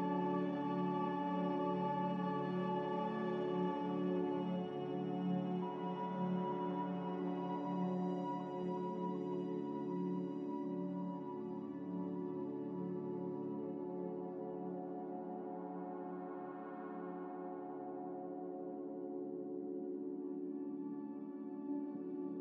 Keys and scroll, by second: 1.0-1.6 typing, 11.8 q, 17.2 F9.